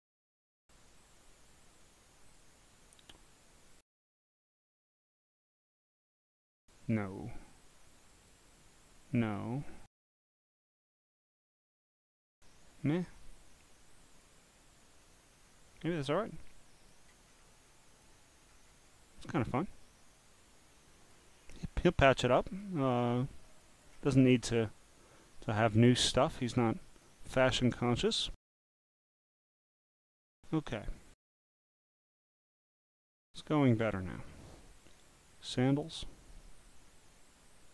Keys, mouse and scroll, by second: 0.9-2.4 drag, 5.4 click, 8.1 click, 9.1 click, 11.2 click, 12.5-14.2 drag, 16.5 click, 17.3-17.7 scroll down 3, 17.7 click, 18.5-19.0 scroll up 7, 19.3-21.1 drag, 22.3 click, 22.9 scroll down 1, 23.6 click, 24.1-24.7 scroll down 9, 24.8 click, 26.0 scroll down 1, 26.5 scroll up 4, 26.9 click, 28.8 click, 31.4-31.8 scroll down 3, 32.9 scroll down 1, 33.8-34.4 scroll down 1, 35.7 click, 36.6-37.7 drag.